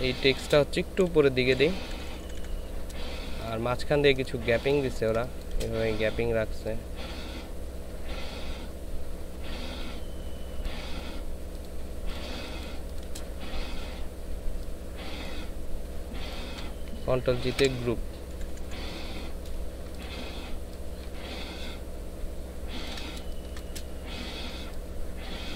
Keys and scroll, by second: 0.3 ctrl+space, 1.0 ctrl+Up, 1.6 ctrl+Up, 4.9 ctrl+space, 12.4 ctrl+space, 17.5 ctrl+shift+g, 18.3 Down, 23.2 ctrl+alt+shift+space.